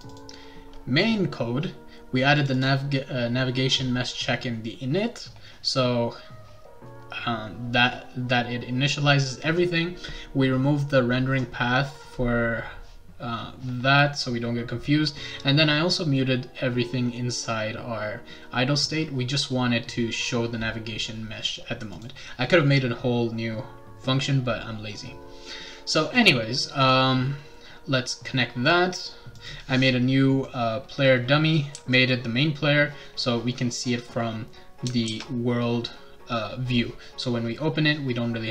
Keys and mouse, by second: 0.1 click, 2.3 click, 2.5 click, 20.2 click, 21.9 click, 26.8 click, 29.3 click, 30.4-32.1 right drag, 31.7 s, 35.1 ctrl+s.